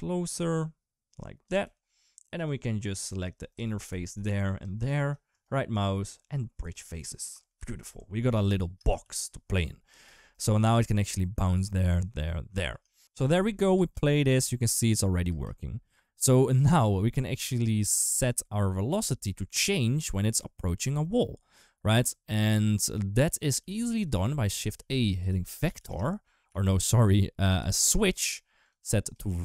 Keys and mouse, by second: 1.4 3, 3.7 alt+z, 6.5 alt+z, 7.4 KP_7, 7.7 Tab, 9.4 ctrl+s, 13.5 space, 15.1 space, 17.6 click, 18.3 click, 18.8 click, 19.0 click, 20.1 click, 20.3 click, 21.3 click, 21.5 click, 23.4 g, 24.6 shift+a, 26.6 shift+a, 29.0 click.